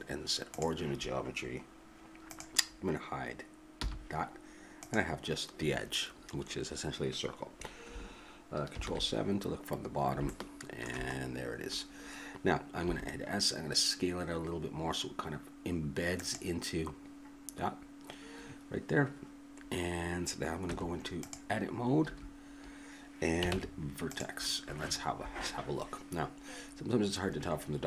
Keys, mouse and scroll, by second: 2.3-4.1 drag, 3.8 h, 4.8-6.7 drag, 12.8 s, 20.6 Tab, 22.1 a, 23.5 ctrl+Tab.